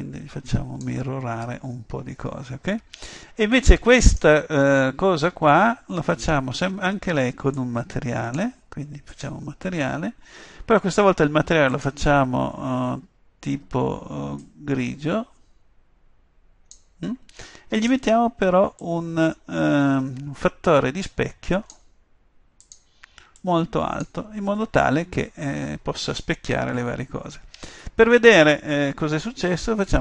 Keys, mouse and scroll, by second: 4.1-5.7 right drag, 5.7-11.0 drag, 11.8-13.6 drag, 17.8-20.6 drag, 22.7-25.2 drag.